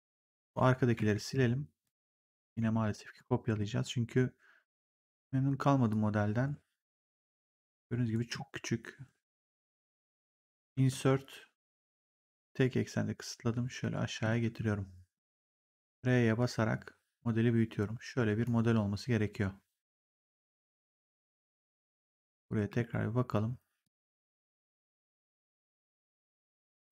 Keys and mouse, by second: 0.3 click, 1.2 Delete, 1.7 click, 2.1 Delete, 2.3 click, 2.5 Delete, 3.1 click, 3.3 w, 4.8 click, 8.2 r, 10.7 Insert, 11.7 click, 12.3 v, 13.7 middle click, 13.7 v, 14.3 r, 15.1 click, 21.9 click, 22.5 w, 23.7 click, 26.7 r.